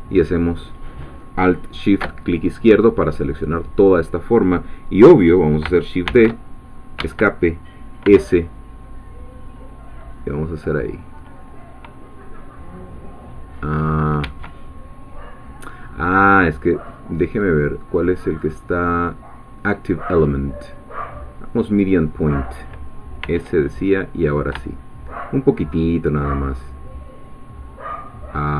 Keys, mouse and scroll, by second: 6.1 shift+d, 7.0 Escape, 8.0 s, 14.2 Escape, 16.3-16.8 scroll down 4, 16.9-17.7 scroll up 2, 18.4 click, 21.7 click, 23.2 s.